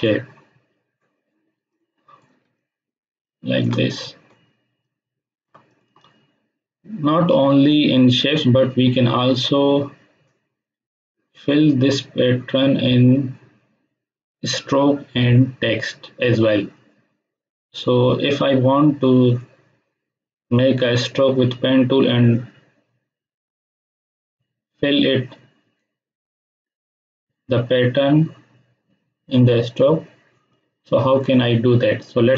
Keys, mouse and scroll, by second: 0.0-1.6 drag, 2.3 space, 2.5-3.8 ctrl+drag, 4.8-5.4 shift+click.